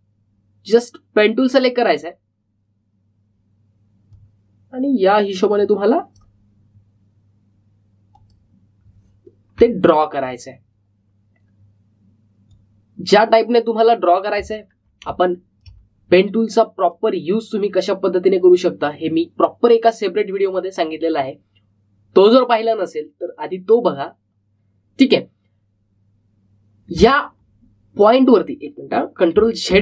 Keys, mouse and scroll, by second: 2.4 click, 5.1-10.5 drag, 10.7-11.2 alt+scroll up 1, 13.4-15.5 drag, 15.5 alt+scroll down 1, 16.0 space, 16.2 click, 16.5 space, 17.8 click, 27.9 alt+Num_Lock, 28.1-28.7 alt+scroll down 1, 29.3-29.8 alt+scroll up 1.